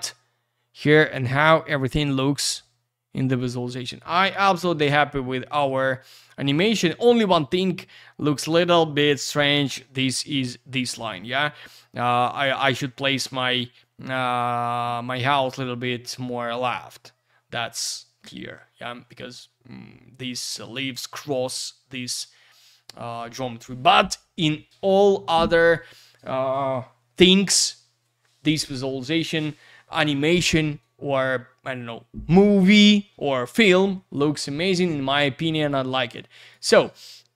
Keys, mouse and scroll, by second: 35.7 click.